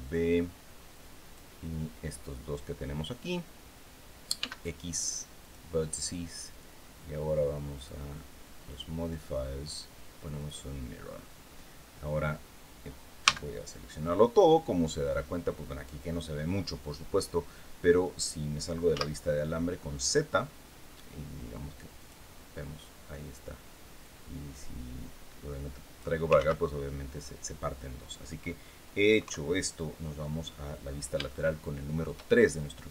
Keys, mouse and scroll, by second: 4.1 x, 5.1 click, 7.4 click, 8.4 click, 10.1 click, 12.9 a, 18.6 z, 21.7 click, 23.7-25.9 drag, 26.0 ctrl+z, 28.9 KP_3, 30.6 scroll down 2, 31.0 shift+middle click, 32.0-32.3 shift+scroll up 2.